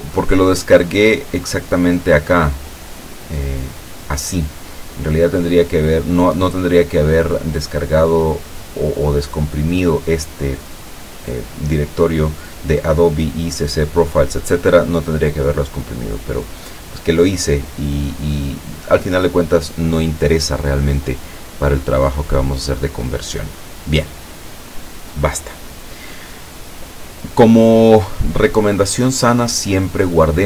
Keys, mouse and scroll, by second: 1.9 click, 3.5 click, 4.4 click, 16.6 click, 18.5 click.